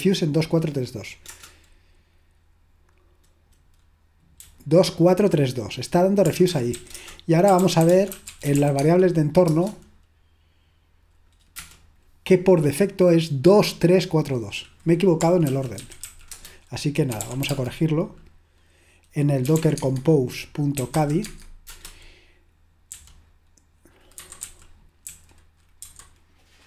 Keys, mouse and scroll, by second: 1.5 Return, 4.4-7.2 typing, 8.6-11.2 typing, 11.6 Return, 21.8 typing, 22.9-25.8 typing.